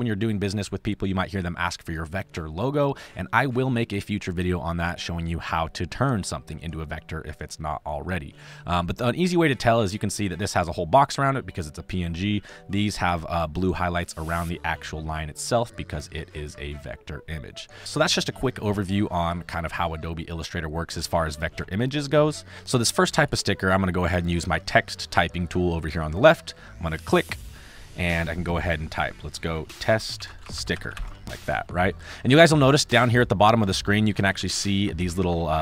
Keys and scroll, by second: 29.5-31.7 typing, 33.6 space.